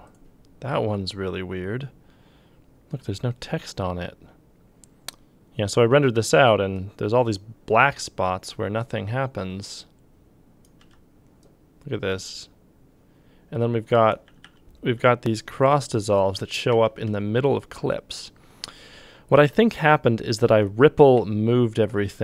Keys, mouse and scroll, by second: 10.8 f, 14.3 g, 15.0 g, 16.7 f, 17.1 f.